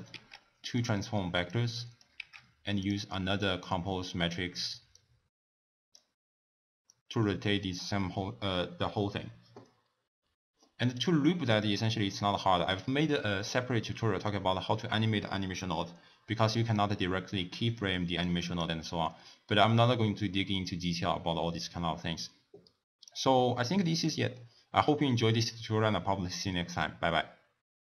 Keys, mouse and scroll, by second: 0.4 shift+d, 1.5 click, 2.4 shift+d, 3.4 drag, 4.9 click, 6.9-9.9 drag, 10.9 click, 12.1-15.1 drag, 18.2-19.2 drag, 19.2-21.8 middle drag, 21.8-23.6 drag, 23.6 middle click, 24.0-24.4 scroll down 1, 24.4-27.4 middle drag.